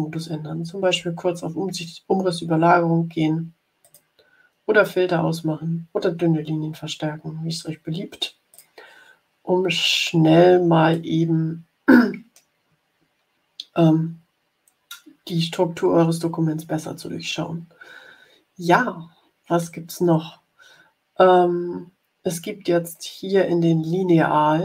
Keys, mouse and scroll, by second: 3.7 click, 8.4 click, 10.8-12.1 middle drag, 12.1 click.